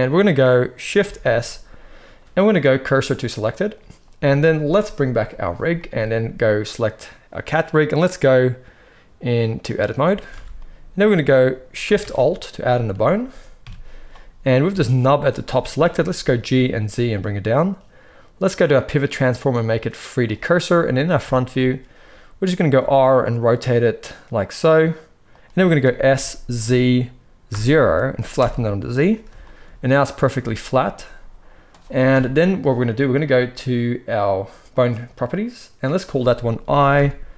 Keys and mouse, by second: 1.1 shift+s, 5.2 click, 5.3-7.7 middle drag, 7.7-17.5 drag, 10.3 alt+a, 11.9 shift+a, 13.5 KP_3, 15.7 g, 17.5-18.7 middle drag, 18.7-21.0 drag, 21.0-35.9 shift+middle drag, 22.7 r, 26.0 s, 32.0 KP_1, 35.9-37.3 drag.